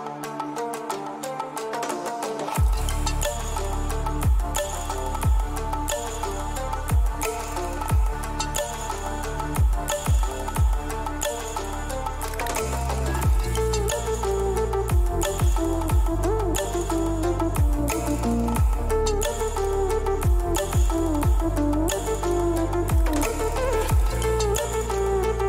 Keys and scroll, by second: 0.7-3.4 typing.